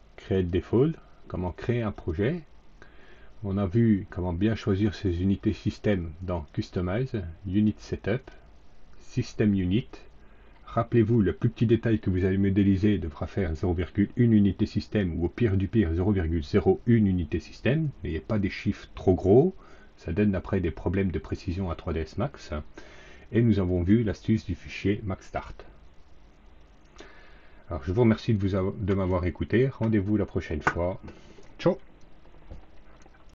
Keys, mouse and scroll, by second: 0.2 click, 1.8 click, 6.4 click, 7.4 click, 9.0 click, 26.5 click, 33.2 click.